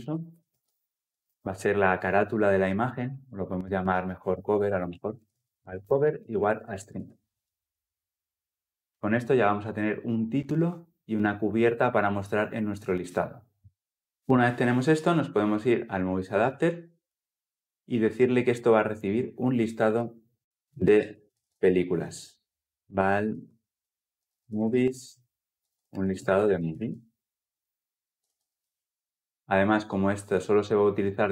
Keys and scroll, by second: 7.1 Escape, 27.3 Escape, 28.0 Escape, 28.0 ctrl+alt+l, 28.2 ctrl+alt+o.